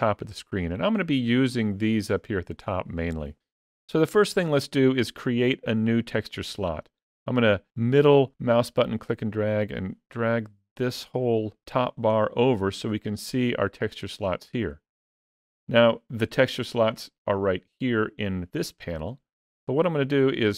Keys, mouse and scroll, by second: 7.7 middle click, 15.7-18.6 scroll up 1.